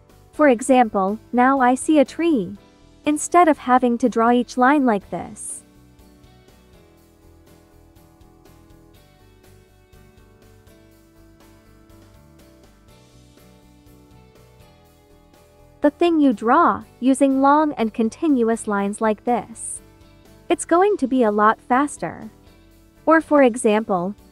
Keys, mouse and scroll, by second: 0.1 space, 0.9 click, 4.8-21.6 drag, 23.3 space, 23.6 click, 23.9 space.